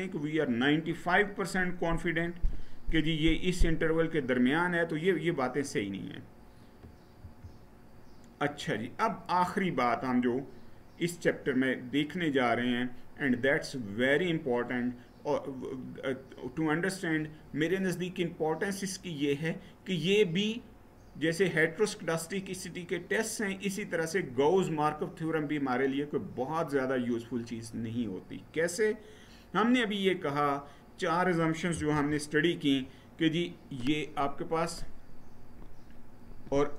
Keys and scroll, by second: 7.0 Right, 31.7 Left.